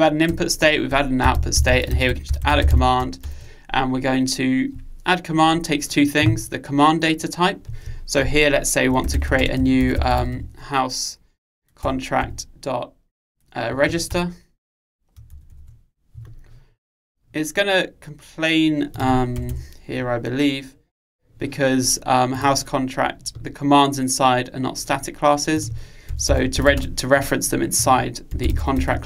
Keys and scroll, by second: 12.0 Return.